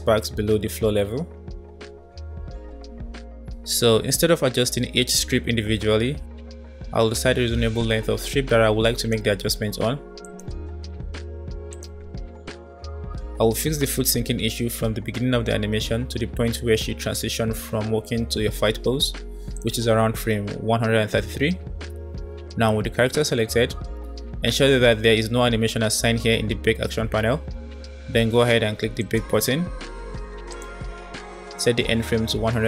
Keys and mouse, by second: 2.0 space, 2.4 space, 8.8-9.2 drag, 10.1-10.9 middle drag, 11.6-12.4 drag, 13.6 middle click, 13.8-18.4 drag, 19.4 click, 28.9-32.6 drag, 32.5 KP_3.